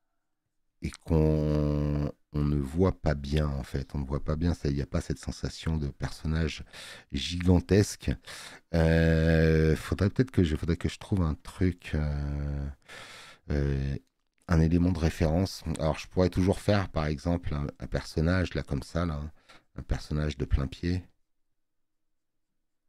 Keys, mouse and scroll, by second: 3.4 click, 8.2 space, 8.8 click, 15.4 click, 15.4 space.